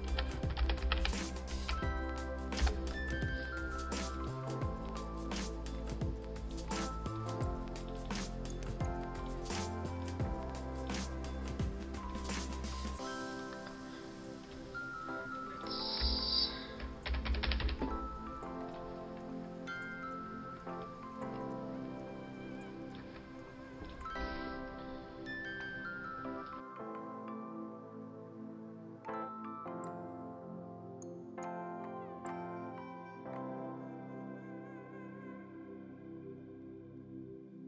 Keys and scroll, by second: 0.0-0.7 typing, 2.5 shift+l, 17.0 Up, 17.1 Up, 17.3 Up, 17.5 Up, 30.4 ctrl+alt+shift+e.